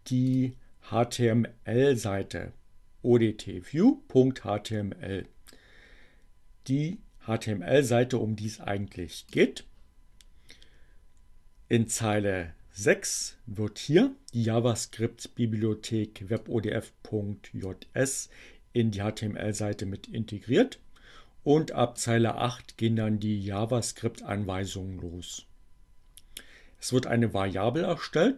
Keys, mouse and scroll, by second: 0.3 click, 8.4-9.6 drag, 15.7-17.9 drag, 22.2 click.